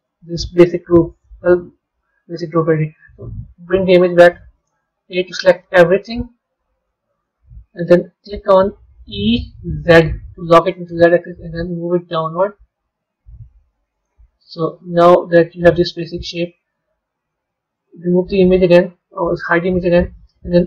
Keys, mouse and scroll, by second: 0.9 b, 3.0 click, 3.7-5.0 middle drag, 7.2 KP_3, 14.4-15.0 middle drag, 17.6 click, 20.1 middle click.